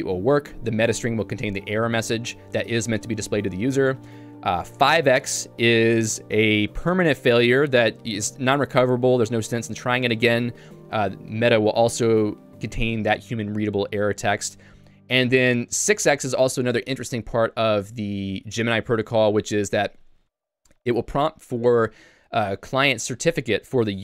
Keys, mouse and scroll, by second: 5.9-6.9 h, 14.5 j, 14.9 h, 15.7 h.